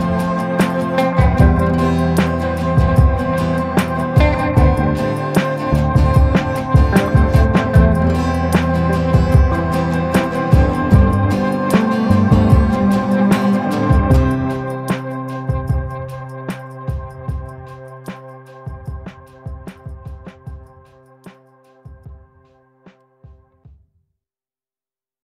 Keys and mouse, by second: 1.8-4.6 drag, 5.3-7.1 middle drag, 7.2 shift+middle click, 7.5 b, 8.4 b, 9.4 b, 10.1 b, 11.3-14.2 typing, 15.7 middle click, 16.3 middle click, 16.7 shift+middle click, 16.9 middle click, 19.5-23.1 drag, 24.0 middle click, 24.9 shift+middle click.